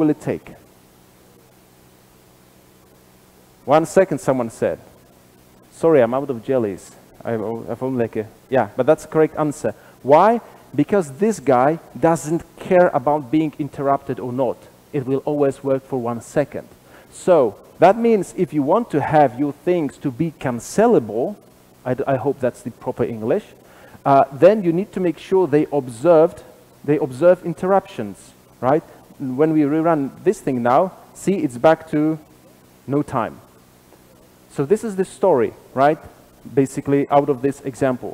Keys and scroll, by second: 3.1 ctrl+r, 3.1 shift+F10, 11.0 super+b, 26.7 super+/, 29.4 ctrl+r, 29.4 shift+F10.